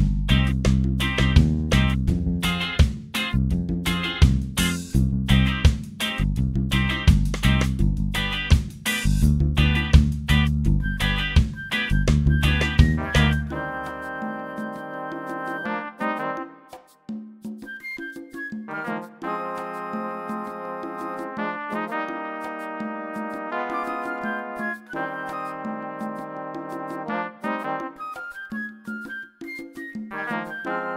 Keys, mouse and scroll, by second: 0.6 click, 2.1 click, 3.2 click, 5.5 click, 6.7 click, 7.7 click, 8.7 click, 10.0-10.8 typing, 11.0 Return, 15.2-15.6 scroll down 1, 16.2 click, 17.7-20.3 drag, 22.0 click, 25.4 click, 26.8 click, 28.3 click, 29.1 shift+click, 30.6 click.